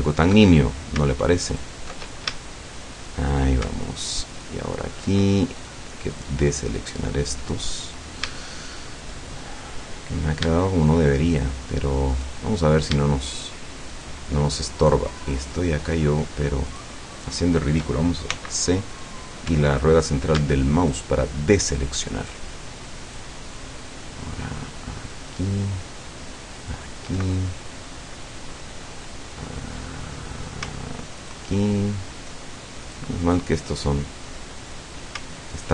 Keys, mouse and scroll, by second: 0.1 alt+shift+right click, 1.5 alt+shift+right click, 2.4-3.3 shift+middle drag, 4.3 alt+shift+right click, 5.6 shift+right click, 6.1 shift+right click, 6.7 shift+right click, 7.7 scroll down 1, 8.4 shift+middle click, 9.3-10.5 shift+scroll up 1, 11.3 shift+right click, 12.1 shift+right click, 13.3 shift+right click, 13.9 shift+right click, 14.8 shift+right click, 15.4 shift+right click, 16.7 shift+right click, 17.1 shift+right click, 18.4 c, 19.1 middle click, 19.6 Escape, 20.9 alt+shift+right click, 22.3 alt+shift+right click, 23.1 alt+shift+right click, 25.1 alt+shift+right click, 26.7 alt+shift+right click, 27.9-29.3 shift+middle drag, 29.4 shift+scroll down 1, 29.8 shift+middle click, 31.3 alt+shift+right click, 32.9 shift+right click, 34.3 shift+middle click, 35.6 alt+shift+right click.